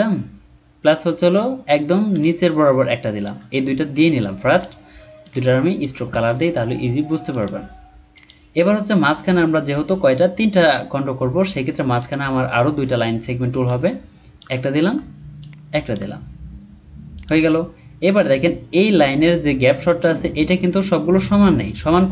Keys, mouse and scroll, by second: 2.2 shift+click, 13.6 shift+click, 15.4 shift+click.